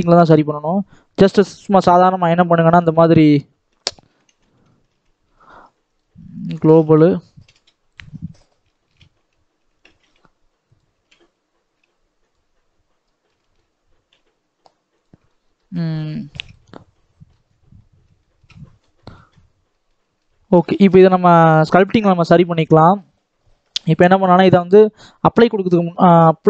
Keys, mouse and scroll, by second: 0.2 e, 4.0 s, 4.8 ctrl+z, 6.2 click, 6.6 s, 8.2-8.6 scroll up 1, 8.6 shift+middle click, 9.0 e, 12.9 middle click, 13.6-14.0 scroll up 1, 14.0 g, 15.2 middle click, 15.6-16.0 scroll down 1, 16.0-17.3 shift+middle drag, 17.3-18.1 scroll down 7, 18.1 shift+middle click, 18.8-19.6 scroll up 3, 19.0 shift+middle click, 19.6-20.9 middle drag, 20.9 ctrl+s, 22.3 middle click, 22.8-25.2 scroll up 1, 25.2-26.4 middle drag.